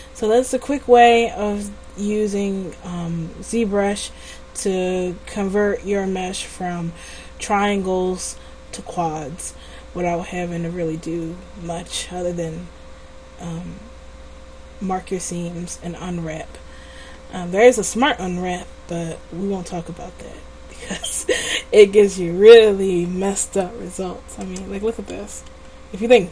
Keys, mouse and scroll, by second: 24.6 Tab, 25.4 a, 25.6 a.